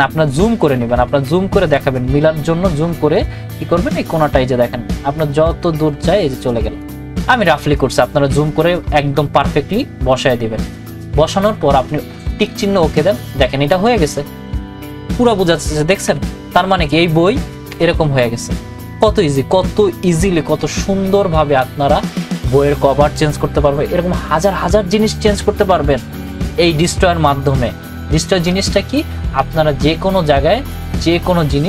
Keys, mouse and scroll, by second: 0.9 ctrl+=, 3.1-9.0 drag, 12.5 click, 15.7 click, 15.9 ctrl+-.